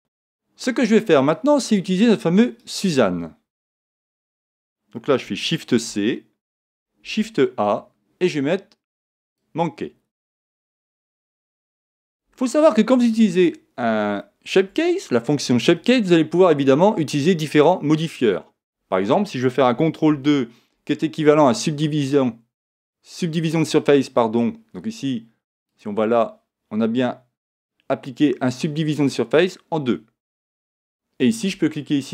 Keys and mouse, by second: 1.6 click, 2.6-4.4 right drag, 3.5 x, 5.7 shift+c, 7.0 shift+a, 12.3-16.1 middle drag, 25.6 click.